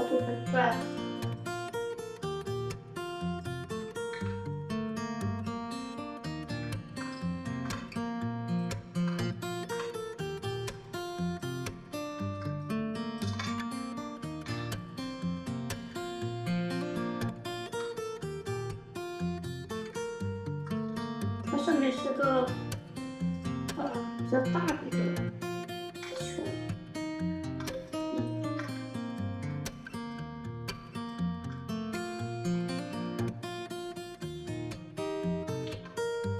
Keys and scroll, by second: 3.9 1, 9.5 Delete, 11.9 r, 12.9-14.3 typing, 17.5 r, 20.7 alt+w, 24.7 2, 31.2 f, 35.5 3.